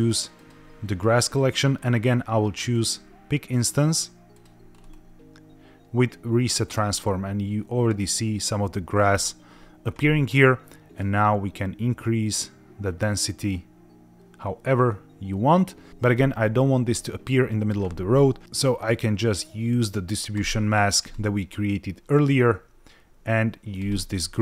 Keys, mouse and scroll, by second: 2.8 click, 4.3 click, 4.7-6.6 scroll down 3, 6.6 click, 10.9-15.9 drag, 18.4-18.8 scroll down 2, 20.3 click, 21.0-24.0 drag.